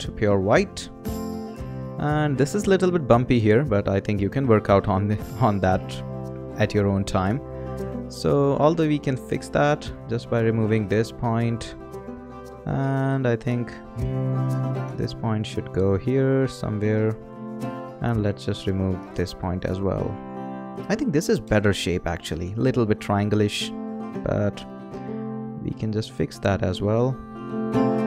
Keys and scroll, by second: 11.2 BackSpace, 19.1 BackSpace, 21.4 Return.